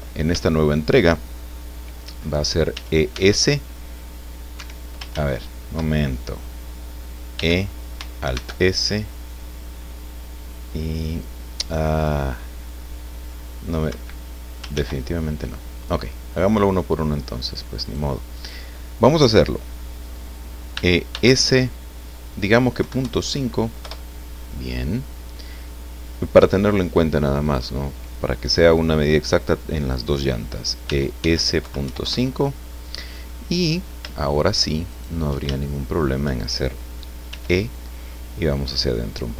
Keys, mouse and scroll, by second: 2.7 e, 3.1 s, 4.5 Escape, 5.1 ctrl+z, 7.3 e, 8.3 alt+s, 13.9 Escape, 14.7 ctrl+z, 17.8 right click, 18.3 right click, 20.7 e, 21.1 s, 22.8 KP_Decimal, 23.0 KP_5, 23.8 KP_Enter, 27.4 right click, 30.8 e, 31.2 s, 31.6 KP_Decimal, 31.8 KP_5, 32.0 KP_Enter, 33.3 middle click, 34.9 shift+right click, 35.6 shift+middle click, 37.3 e.